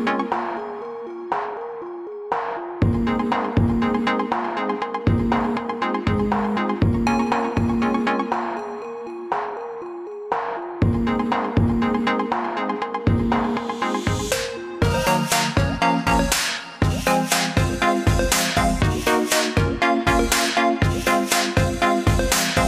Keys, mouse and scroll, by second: 15.3-15.9 alt+scroll up 2, 16.5 click, 17.6 click, 18.7 click, 19.3 click, 20.9 click.